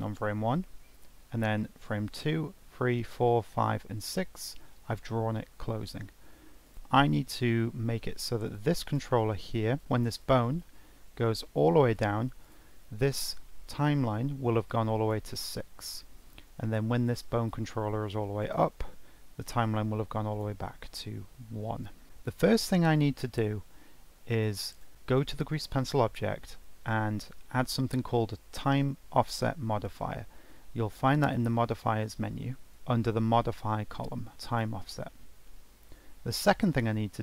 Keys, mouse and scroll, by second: 0.9-2.2 alt+scroll down 1, 2.2-2.8 alt+scroll down 1, 2.8-6.6 alt+scroll down 3, 6.6-9.8 drag, 9.8 ctrl+Tab, 10.2 click, 11.2 g, 13.3-16.4 drag, 17.1 g, 19.4-21.8 drag, 23.2 click, 24.3-24.9 drag, 31.2 click, 32.7 click.